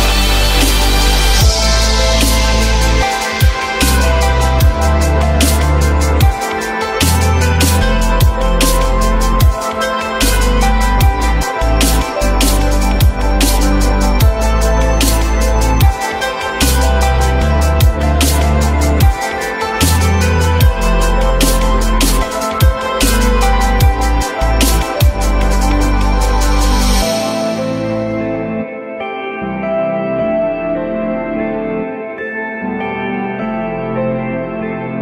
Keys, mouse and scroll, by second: 13.0 j, 13.3 alt+middle click, 13.9 alt+middle click, 16.1 z, 22.2 alt+middle click, 23.9 alt+middle click, 26.2 w, 30.5 f, 33.5 alt+middle click.